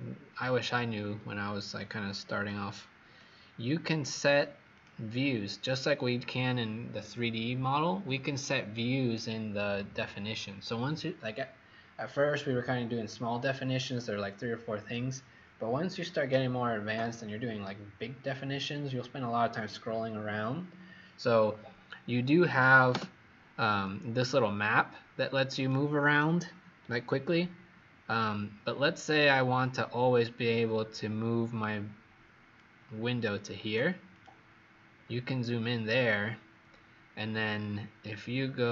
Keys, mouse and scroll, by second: 0.7 scroll up 1, 1.7 click, 24.3 click, 34.9 scroll up 1, 38.6 click.